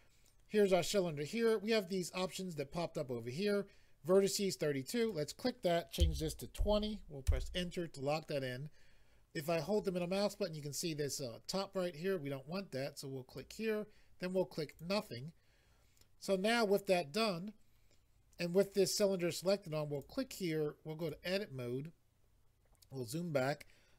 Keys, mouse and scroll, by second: 5.0 click, 6.0 2, 6.6 0, 7.3 Return, 9.5 middle click, 13.3 click, 14.7 click, 19.9 click, 21.0 click, 21.1 click, 22.6-23.9 scroll down 2.